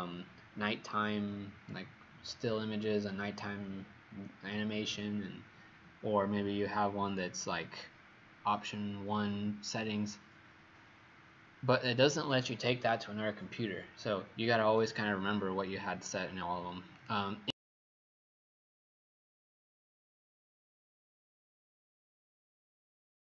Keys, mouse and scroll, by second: 17.0 click.